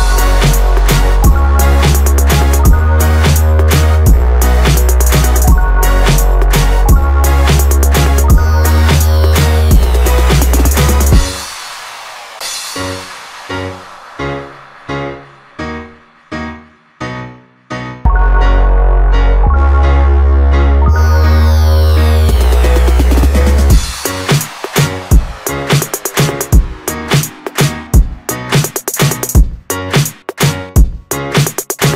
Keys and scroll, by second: 5.4 Return, 15.2 Return, 26.2 Return.